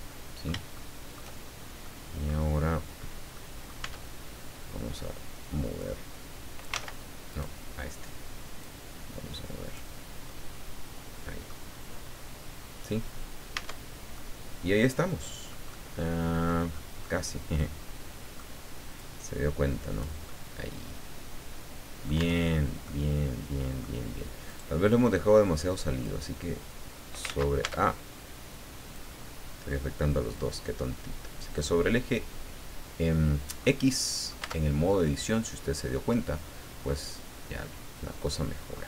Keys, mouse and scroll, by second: 0.7 shift+middle click, 1.8 middle click, 3.3 middle click, 3.8 Tab, 5.8-6.8 drag, 6.8 ctrl+z, 7.3 ctrl+right click, 8.6-9.9 drag, 10.3-11.6 middle drag, 11.8 scroll down 2, 12.5 scroll down 2, 13.5 Tab, 14.2-15.7 middle drag, 17.0-18.6 middle drag, 19.0-20.2 drag, 20.3 middle click, 20.3-22.2 drag, 22.2 Tab, 22.8-24.0 middle drag, 24.4 right click, 26.0-27.4 drag, 27.3 ctrl+z, 27.6 ctrl+Tab, 28.9-31.8 drag, 33.2 scroll down 1, 33.6 middle click, 34.4 Tab, 34.9 click, 35.0 middle click, 35.8-38.4 middle drag.